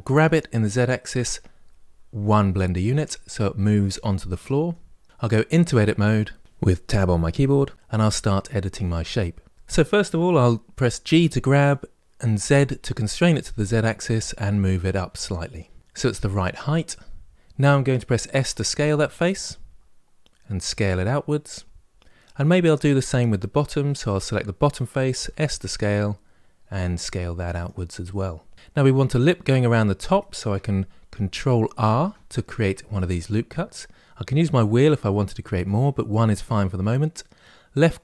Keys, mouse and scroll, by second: 2.7-5.1 middle drag, 5.4 Tab, 10.9 g, 18.1 s, 22.1-23.7 middle drag, 23.7 click, 25.0 s, 27.8-29.8 middle drag, 31.6 ctrl+r.